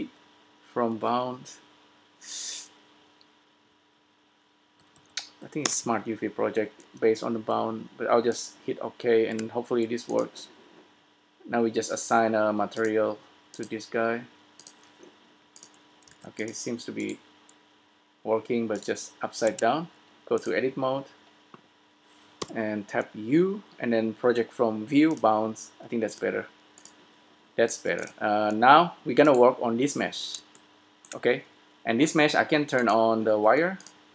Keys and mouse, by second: 5.0 Down, 9.5 Tab, 12.7-15.5 drag, 16.2-17.4 drag, 16.2 s, 17.6-18.8 drag, 19.2 click, 19.7 Tab, 19.7 click, 20.5 click, 22.9 u, 26.4 Tab, 28.3 s, 29.9-31.3 drag, 32.9-34.1 drag.